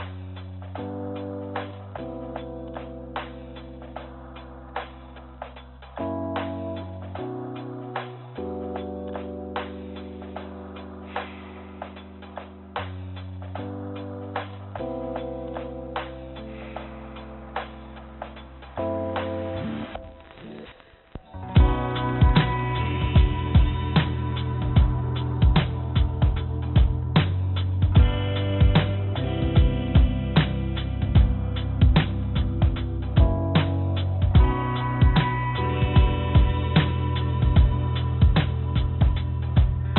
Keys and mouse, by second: 0.1 shift+d, 3.0-4.8 drag, 5.9 click, 17.5 click, 19.8 Tab, 21.0 click, 23.8 Tab, 26.3-27.5 drag, 29.4 click, 30.0 click, 31.0 click, 33.0 click, 34.8 click, 35.3 click, 36.3-39.9 drag.